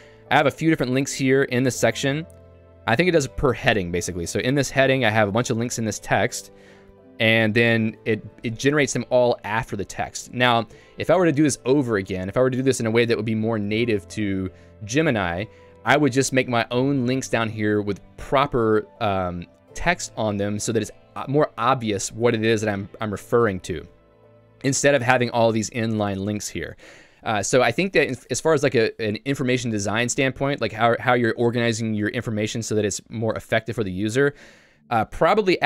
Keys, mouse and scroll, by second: 1.7 j, 3.2 k, 4.7 j, 5.7 k, 6.1 j, 9.7 k, 16.4 j, 17.9 k.